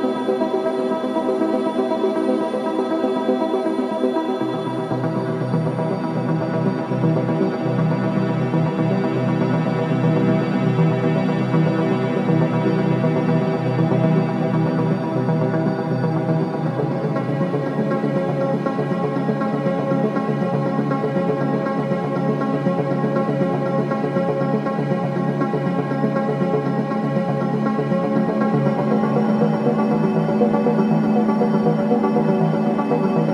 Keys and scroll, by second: 16.9 4, 20.7 F1, 26.9 3, 27.2 ].